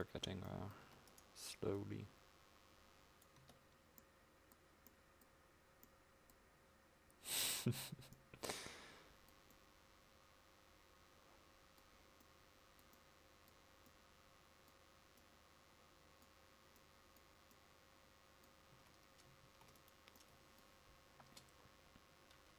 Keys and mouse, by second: 0.9 Tab, 3.5 Tab, 18.9 a, 19.5 ctrl+s, 21.3 KP_0.